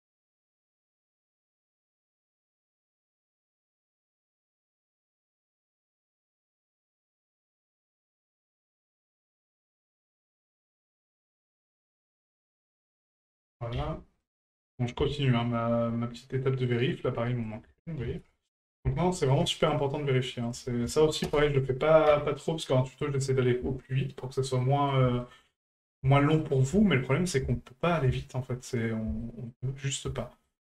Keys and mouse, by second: 1.3 alt+shift+right click, 4.7 ctrl+click, 8.0 right click, 8.9 ctrl+click, 11.6-12.8 ctrl+drag, 14.6 middle click, 15.2 shift+middle click, 15.9 middle click, 16.7 right click, 17.6-18.7 ctrl+drag, 20.4 ctrl+click, 23.0-23.4 middle drag, 23.9 shift+middle drag, 24.6-24.9 middle drag, 25.2 shift+middle drag, 25.6 middle drag, 26.1-26.4 shift+middle drag, 26.8-27.1 shift+middle drag, 27.5-27.8 shift+middle drag, 28.2 shift+middle drag, 29.2-29.5 shift+middle drag, 29.8 middle drag, 30.2-30.5 shift+middle drag.